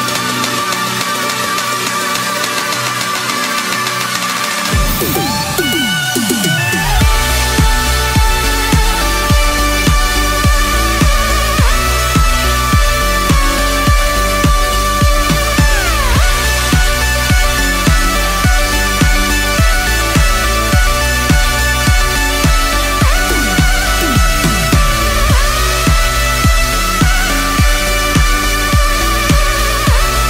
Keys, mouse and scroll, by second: 3.6-5.2 typing, 6.1 Down, 6.3 Return, 7.3-11.2 drag, 11.6 F10, 12.3 click, 13.1-18.3 typing, 18.6 Return, 19.8-23.1 drag, 23.1 F10, 23.5 click, 25.1-25.9 scroll down 2, 25.9 F10, 26.5 click, 29.4-30.2 typing.